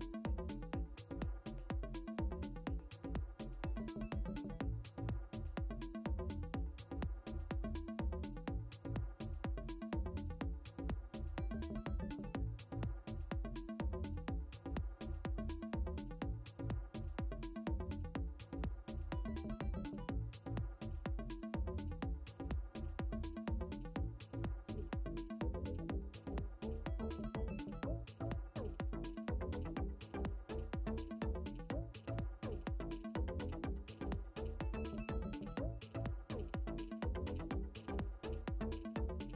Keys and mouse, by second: 1.2 alt+BackSpace, 3.7 alt+BackSpace, 6.6 alt+BackSpace, 12.4 ctrl+d, 13.8 click, 16.6 click, 19.3 Down, 22.4 Down, 28.8 Down, 34.1 Down, 34.7 Up, 37.0 Down.